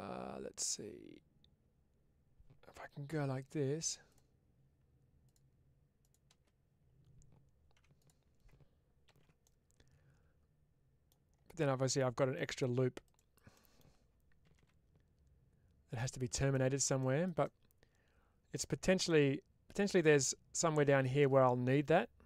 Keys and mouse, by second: 7.6 2, 9.0 ctrl+x, 9.3-10.9 middle drag, 11.4 middle click, 12.2 middle click, 13.4 middle click, 15.8 click, 16.4 middle click, 17.3-18.4 middle drag, 18.9 middle click, 21.1-22.2 middle drag.